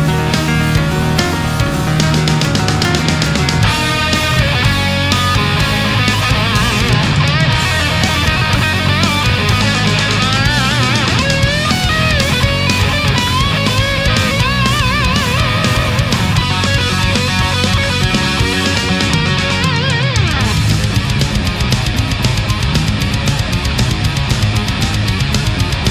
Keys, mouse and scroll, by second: 0.2 shift+right click, 0.6 shift+right click, 0.9 shift+right click, 1.4 shift+right click, 1.8 shift+right click, 2.9-4.4 drag, 4.6-6.9 middle drag, 7.4-9.9 middle drag, 10.7 right click, 11.2 middle click, 12.3 shift+right click, 12.9 shift+right click, 13.4 shift+right click, 13.9 shift+right click, 14.3 shift+right click, 15.1-16.4 drag, 16.4-21.4 middle drag, 21.9 right click, 22.7 shift+right click, 23.1 shift+right click, 23.8 shift+right click, 24.4 shift+right click, 25.1-25.9 shift+drag.